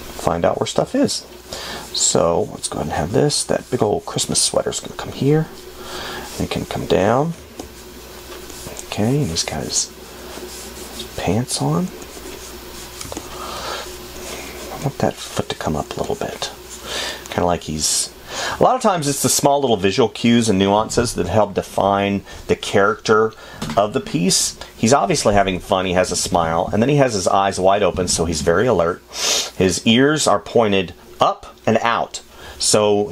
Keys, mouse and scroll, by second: 1.2 space, 7.5 space, 13.4 space, 25.3 space, 27.9 space.